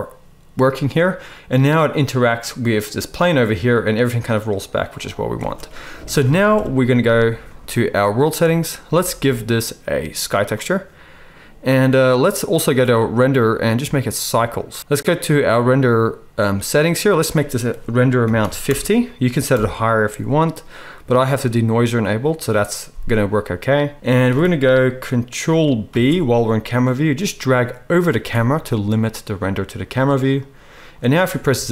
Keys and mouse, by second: 5.3 space, 6.5 KP_0, 8.2-9.2 drag, 12.9-13.5 drag, 25.8 ctrl+b, 28.1-31.5 drag, 28.1-31.5 middle drag, 28.1-31.5 right drag, 31.5 z.